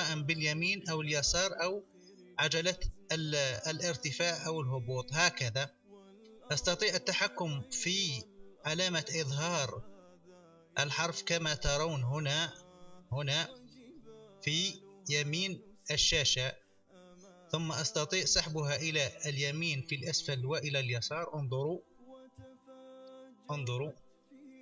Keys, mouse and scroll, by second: 10.7 click, 16.7 click, 17.7 click, 20.6 click, 22.2 n, 24.0 click.